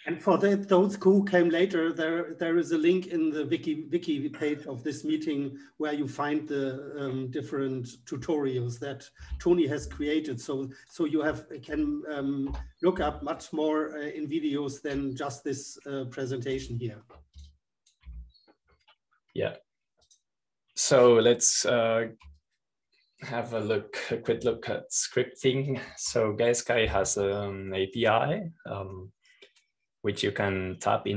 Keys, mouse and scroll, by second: 8.3-10.4 drag, 11.3 super+-, 12.4 click, 13.3 middle click, 13.8 super+-, 14.4 super+Return, 16.9 super+t, 18.5 super+t, 19.3 click, 20.0 super+t, 27.6 right click, 28.9-29.9 scroll down 1.